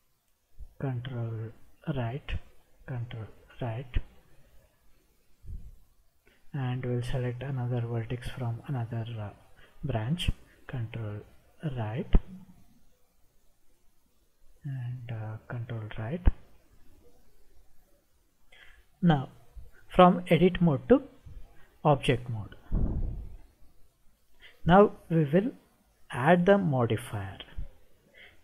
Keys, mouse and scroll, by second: 2.0 ctrl+right click, 3.5 ctrl+right click, 7.6 click, 11.7 ctrl+right click, 12.9-14.4 middle drag, 15.7 ctrl+right click, 23.2 Tab, 26.2 click, 27.4-28.4 drag.